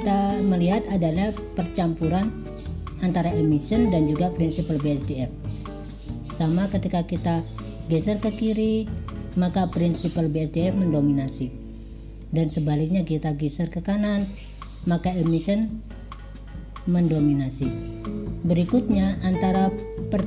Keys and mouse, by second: 5.8-9.1 drag, 12.5-14.6 drag.